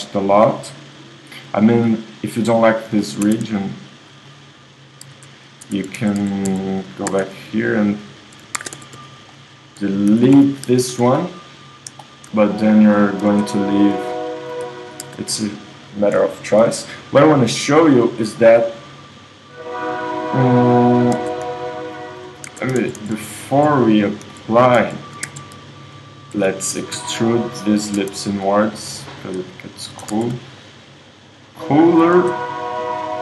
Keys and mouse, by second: 3.3 Tab, 5.1 Tab, 5.7 Tab, 6.0 z, 6.2 z, 6.5 z, 7.1 Tab, 8.0 super+middle click, 8.6 ctrl+Tab, 10.1 x, 10.8 Tab, 13.6 Tab, 15.1 Tab, 16.3-17.5 middle drag, 18.2 click, 19.3 click, 20.7 click, 21.3 Tab, 22.5 Tab, 22.9-23.3 z, 23.8 z, 24.3 z, 24.8 z, 25.3 Tab, 26.1-27.8 drag, 26.7 e, 28.0 Tab, 30.2 z, 32.2 Tab.